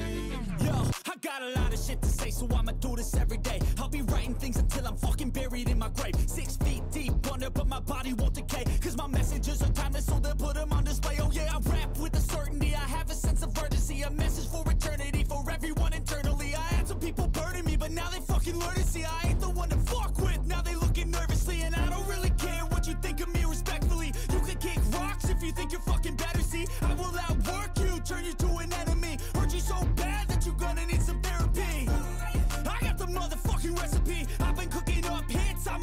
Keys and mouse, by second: 1.6 right click, 7.2 right click, 12.1 right click, 23.0 right click, 24.4 right click, 25.2 right click, 25.5 right click, 26.2 right click, 28.7 right click, 29.4 right click, 30.0 right click, 35.4 right click.